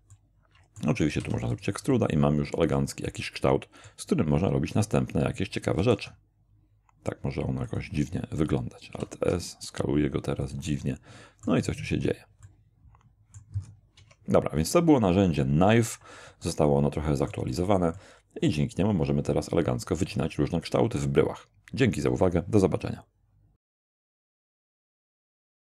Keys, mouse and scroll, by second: 0.1-1.0 middle drag, 1.2 e, 1.5 click, 1.9-4.1 middle drag, 5.8 alt+s, 7.7 click, 8.8 alt+s, 10.4 click, 10.8-11.7 middle drag, 11.7 scroll up 1, 12.4-13.6 middle drag, 13.6-14.0 scroll down 1, 14.0 Tab, 16.4-17.5 shift+middle drag, 17.7 shift+scroll down 2, 18.0-20.2 shift+middle drag.